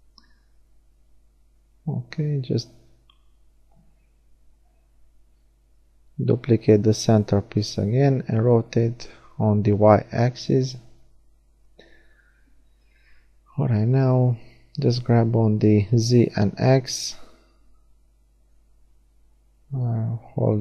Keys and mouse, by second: 1.1-3.0 middle drag, 3.0 shift+d, 4.4 r, 11.4 click, 14.9 g, 17.0-18.5 drag, 18.3 g.